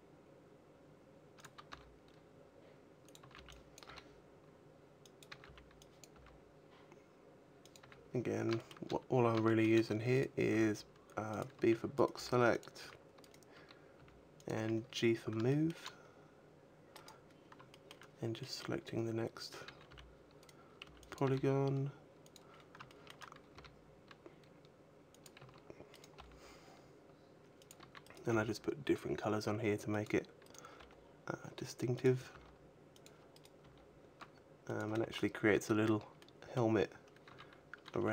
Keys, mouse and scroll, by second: 1.2 click, 1.4 g, 2.9 click, 3.0 a, 3.5 b, 3.6 g, 5.0 click, 5.1 a, 5.6 b, 5.7 g, 7.5 click, 7.6 a, 7.9-8.3 scroll down 2, 8.3 shift+middle click, 8.7-9.2 scroll up 3, 9.2 shift+middle click, 9.8 right click, 10.2 g, 11.2 click, 11.3 a, 11.7 right click, 11.9 g, 12.4 click, 12.6 a, 13.0 right click, 13.7 g, 14.2 click, 14.3 a, 14.7-15.3 scroll down 3, 15.3 shift+middle click, 16.7 right click, 17.5 shift+middle click, 18.2 middle click, 18.6-19.4 scroll down 4, 19.4 a, 19.6 b, 20.2 right click, 20.6 b, 21.0 g, 22.1 click, 22.3-23.3 scroll up 6, 22.6 shift+middle click, 23.3 g, 24.9 click, 25.1 a, 25.6 right click, 26.5 g, 27.5 click, 27.5 a, 27.7 right click, 28.0 g, 29.8 click, 30.4 right click, 30.6 g, 31.8 click, 32.1 g, 32.8 click, 33.1 right click, 33.4 g, 34.5 click, 34.7 a, 35.9 middle click, 35.9 scroll down 4, 36.6-37.1 scroll up 2, 37.1 a, 37.7 r.